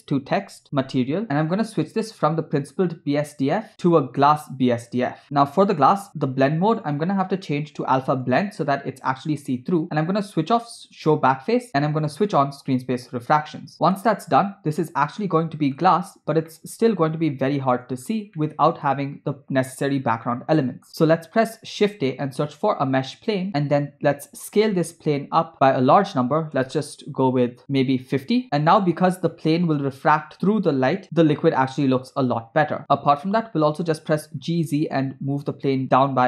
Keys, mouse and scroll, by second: 3.3-5.1 drag, 5.5-6.9 scroll down 3, 7.0-8.7 drag, 9.9-11.6 scroll down 2, 11.7 click, 14.0-15.8 middle drag, 15.9-16.4 scroll up 2, 16.6-17.8 middle drag, 18.1 scroll down 1, 18.4-18.9 middle drag, 20.2 scroll down 2, 20.3-20.9 middle drag, 21.9 shift+a, 24.7 s, 28.4 middle click, 28.5-29.4 scroll up 4, 29.4 scroll down 1, 30.1-30.4 scroll down 2, 31.5 space, 32.5 space, 33.6 g.